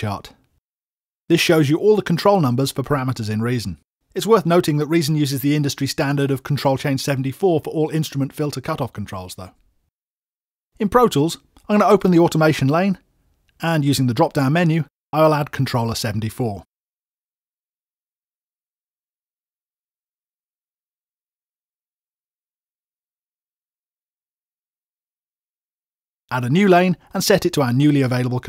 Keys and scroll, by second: 9.7 super+Tab.